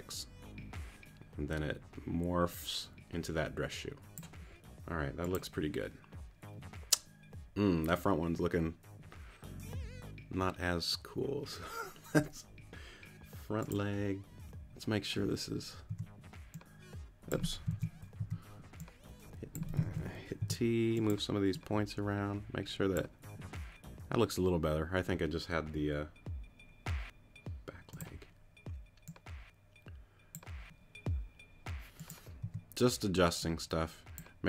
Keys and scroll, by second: 15.9 t, 18.0 super+z, 18.2 super+t, 18.8 t, 20.4 super+t, 20.9 t, 32.4 t.